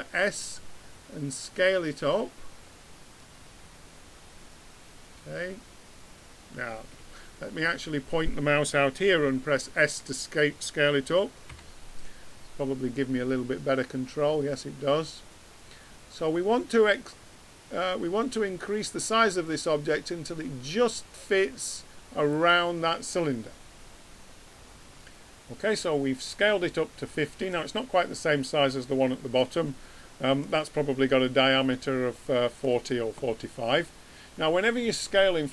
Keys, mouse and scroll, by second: 0.0 s, 11.5 s, 23.2-24.6 middle drag, 29.3 middle click.